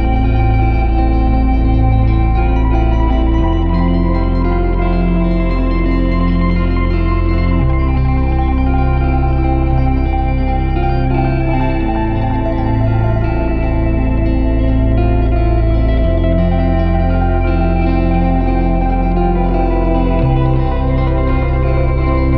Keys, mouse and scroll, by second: 3.9-4.8 scroll up 1, 4.8-6.2 drag, 7.1 click, 7.8 shift+a, 14.0-17.1 drag, 17.2-22.3 drag.